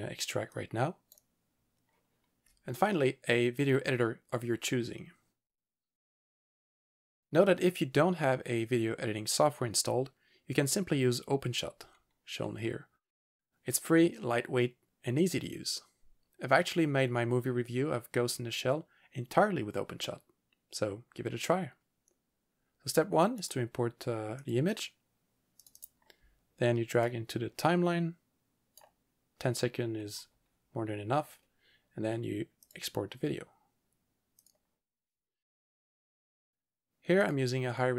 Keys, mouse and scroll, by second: 0.5 double click, 0.6 double click, 6.1 click, 23.4 right click, 24.5 click, 27.1 click, 32.7 click, 34.4 click, 37.2 click.